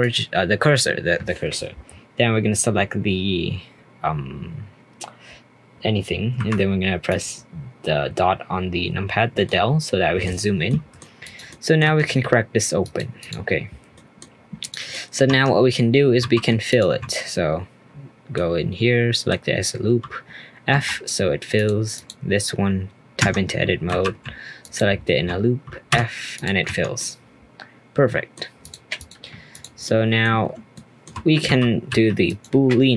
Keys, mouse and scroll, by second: 0.0 click, 3.4 scroll up 4, 3.7-5.7 scroll down 2, 6.4 KP_Decimal, 7.1 click, 7.5-9.4 scroll down 3, 9.4-10.5 middle drag, 10.5 scroll up 1, 10.7-11.2 middle drag, 11.2 click, 11.5-11.8 middle drag, 11.8 r, 13.2 click, 13.9-14.3 middle drag, 14.3 scroll up 2, 14.6 click, 14.9-15.2 middle drag, 15.2 Tab, 16.2 2, 16.7 alt+click, 18.3-19.9 middle drag, 19.9 f, 20.7 Tab, 21.5 click, 21.9 click, 23.2 Tab, 23.9 2, 24.6 alt+click, 25.9 f, 26.3 click, 26.6 Tab, 27.0-28.6 middle drag, 28.6 click, 29.0 click, 29.5 click, 29.8-30.3 middle drag, 30.3-30.7 scroll down 1, 30.7-31.4 shift+middle drag, 31.4 g, 32.7-32.9 scroll up 1.